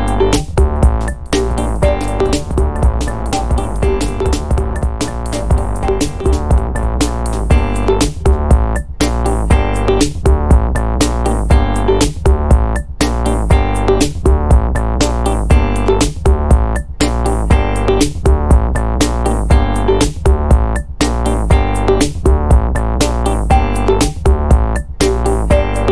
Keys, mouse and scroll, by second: 0.3 click, 0.8 space, 4.3 click, 4.9 click, 6.2 click, 7.9 click, 8.7 click, 10.1-15.5 drag, 15.5 o, 16.9 click, 17.8 ctrl+click, 19.5 click, 20.7 click, 22.7 ctrl+click, 23.3 ctrl+click, 23.9 ctrl+right click, 25.2 click, 25.7 click.